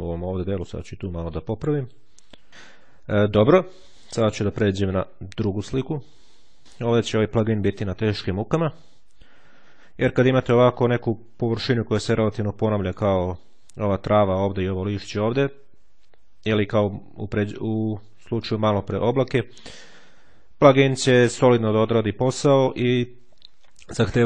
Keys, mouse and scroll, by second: 0.8 ctrl+click, 2.1 ctrl+click, 4.3-6.0 drag, 6.3 click.